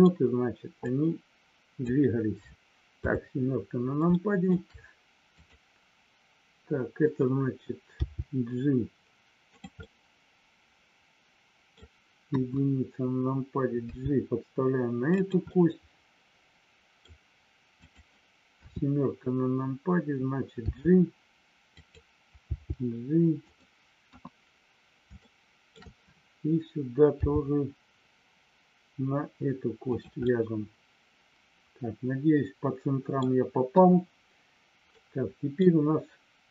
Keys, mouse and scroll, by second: 0.9-1.9 drag, 3.0 KP_7, 4.1 shift+middle click, 5.4 click, 9.4 click, 9.8 scroll up 1, 9.9-11.4 middle drag, 11.4 scroll up 1, 11.5 middle click, 11.7 scroll down 1, 12.3 KP_1, 13.8 g, 15.0 click, 15.5-17.0 middle drag, 17.8 click, 18.7 KP_7, 20.5 g, 21.7 click, 23.4 click, 24.1 KP_1, 25.3 shift+middle click, 29.9 click, 30.3 scroll up 1, 30.4-33.3 middle drag, 33.7 KP_1, 34.9 middle click, 34.9 scroll up 1.